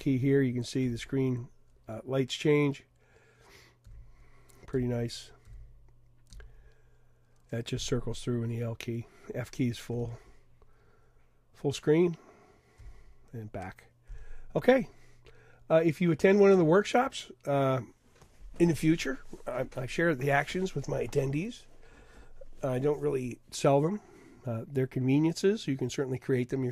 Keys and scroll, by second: 3.9 |, 5.4-6.4 typing, 9.9 f, 10.7 f, 12.8 f.